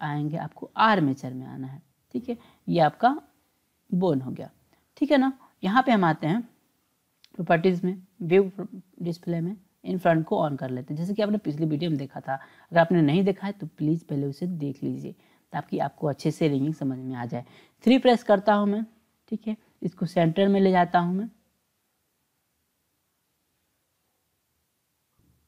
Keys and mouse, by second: 3.2-5.0 drag, 6.9 click, 8.2 click, 10.1 click, 11.7-12.9 drag, 13.7-15.4 drag, 17.9 KP_3, 19.9-25.4 drag.